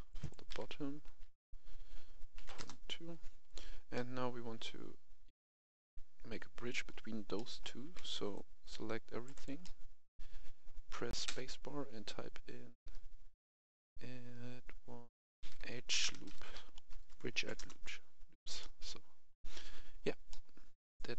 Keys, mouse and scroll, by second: 0.1 right click, 0.4 e, 1.0 s, 2.4 2, 2.5 Return, 3.8-7.2 middle drag, 8.2 click, 9.2 right click, 9.5-10.7 middle drag, 11.7 space, 15.3-17.2 typing, 17.5 Return, 18.5-20.2 middle drag, 20.6-21.0 scroll up 1, 21.0 middle click.